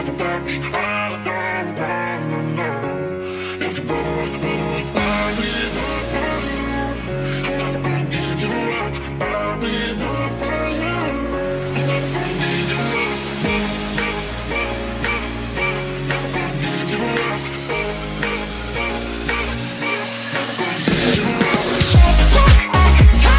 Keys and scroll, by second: 9.3 1, 9.5 Return.